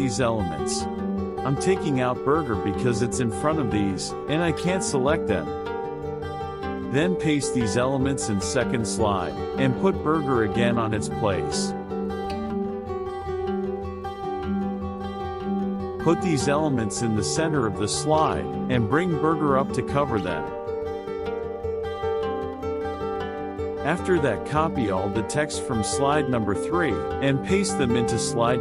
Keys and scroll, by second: 6.1 ctrl+c, 7.9 ctrl+v, 22.0 KP_Subtract, 25.3 ctrl+c, 26.7 ctrl+v.